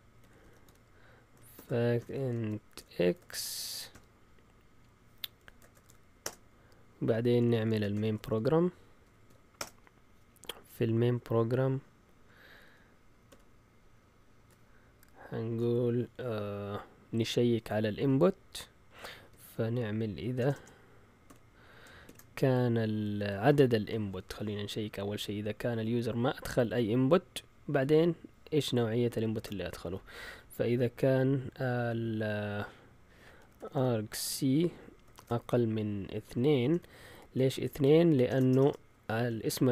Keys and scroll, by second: 0.0-10.0 typing, 13.3 typing, 15.2-16.0 typing, 19.0-22.0 typing, 29.3 shift+super+z, 33.1-35.2 typing, 36.6 Delete, 36.7 Delete, 37.3-39.7 typing, 39.3 Up.